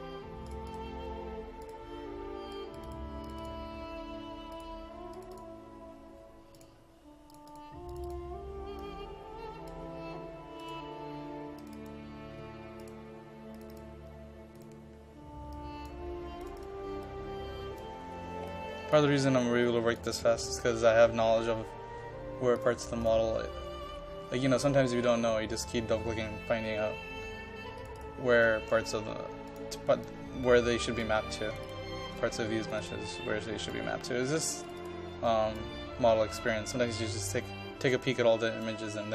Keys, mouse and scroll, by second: 5.2-18.0 drag, 18.0-18.5 scroll up 1, 18.5 click, 19.1-19.7 scroll down 1, 19.7 click, 24.0-25.2 scroll down 1, 25.2 scroll up 1, 27.8-39.1 drag.